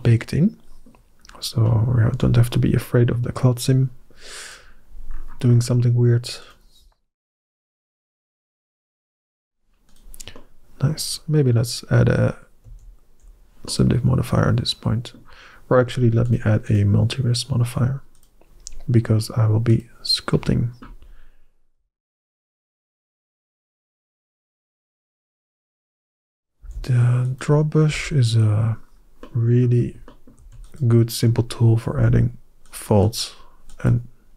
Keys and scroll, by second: 1.9 Tab, 8.7 Delete, 12.5 ctrl+&, 22.0 ctrl+Tab, 26.5 f, 27.7 f, 31.8 f.